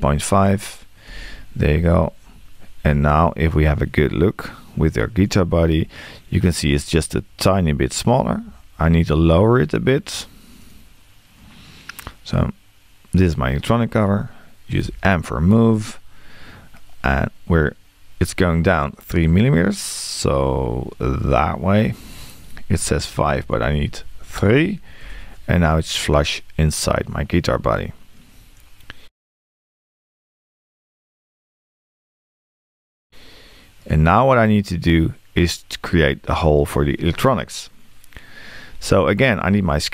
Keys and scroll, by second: 14.8 m, 22.8 BackSpace.